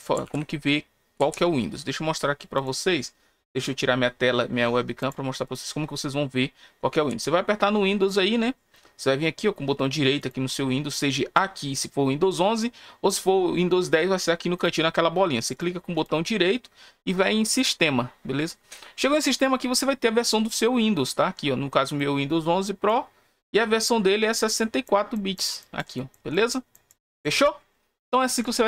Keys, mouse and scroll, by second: 2.5 click, 5.0 click, 10.1 right click, 14.5 right click, 15.5 right click, 15.9 right click, 17.5 click, 20.8 scroll down 1, 21.9 click, 24.5 click, 25.1 click, 25.6 click, 25.9 click, 26.3 click, 26.7 click, 27.0 click, 28.3 click.